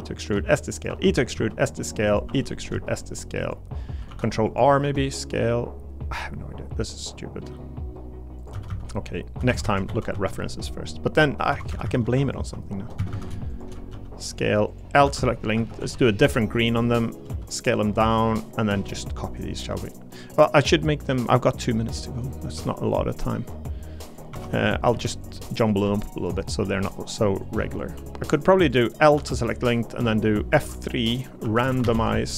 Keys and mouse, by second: 0.0-2.7 typing, 0.2 click, 0.7 click, 1.2 click, 2.1 click, 2.5 click, 4.1 ctrl+r, 4.8 s, 8.4 click, 8.5 a, 8.7 a, 9.5 ctrl+z, 9.6 ctrl+z, 10.1 ctrl+z, 11.1 click, 11.5 2, 11.7 a, 11.8 a, 13.1 a, 13.5 alt+shift+click, 13.9 s, 14.3 click, 14.7 click, 15.0 l, 15.5 a, 15.8 g, 16.7 click, 17.3 s, 17.7 click, 19.5 middle click, 19.9 middle click, 21.4 middle click, 22.5 1, 23.5 click, 24.3 1, 24.6 click, 24.9 g, 25.2 click, 25.8 g, 26.2 click, 26.6 g, 27.8 click, 27.9 g, 28.3 click, 29.1 l, 30.6 F3.